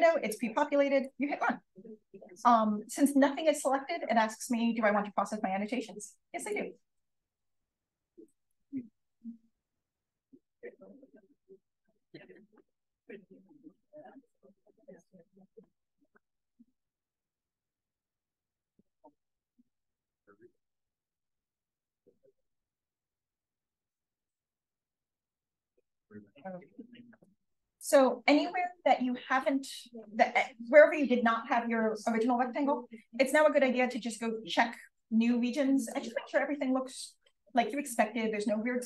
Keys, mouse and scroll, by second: 0.9 click, 6.3 click, 16.6-17.9 scroll up 1, 17.9 scroll up 1, 18.0-18.7 scroll down 1, 18.7-20.2 scroll up 1, 25.0-25.8 scroll up 1, 25.8-26.5 scroll up 1, 26.5-28.0 scroll up 1, 28.0-29.0 scroll up 1, 29.0-29.7 scroll up 1, 29.7-31.5 scroll down 1, 31.5-32.5 scroll down 1, 32.5-33.5 scroll down 1, 33.5-34.0 scroll down 1, 34.0-35.5 scroll up 1, 35.5 click, 36.6-38.3 scroll down 1, 37.5 click, 38.3 click, 38.3-38.8 scroll down 1.